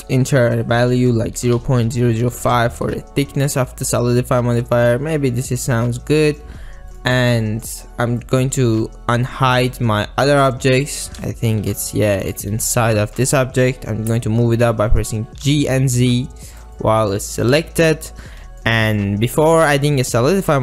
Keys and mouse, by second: 2.0 KP_0, 3.5-4.2 middle drag, 4.2 drag, 4.5 middle drag, 4.7-5.1 drag, 5.1-6.5 middle drag, 7.0 click, 7.2 click, 7.5 click, 8.3 click, 9.6 click, 11.3 middle drag, 11.5 click, 11.7 alt+z, 12.3 middle click, 12.6 alt+z, 12.9 middle click, 14.3-14.7 ctrl+drag, 15.5 g, 15.9 z, 16.8-17.9 middle drag, 18.5 middle click, 19.0-19.4 middle drag, 20.0-20.6 middle drag.